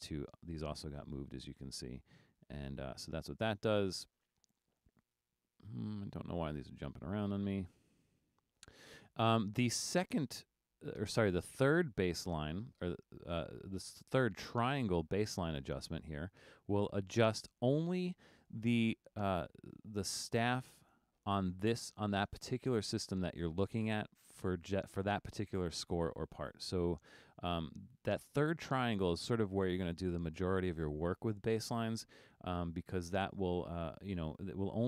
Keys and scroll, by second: 3.8 super+z, 6.8 super+z, 8.1 super+z.